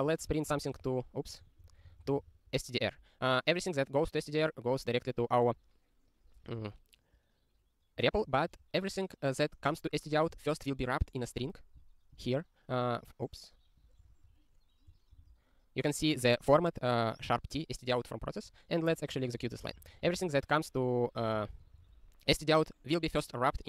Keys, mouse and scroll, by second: 0.0 ctrl+e.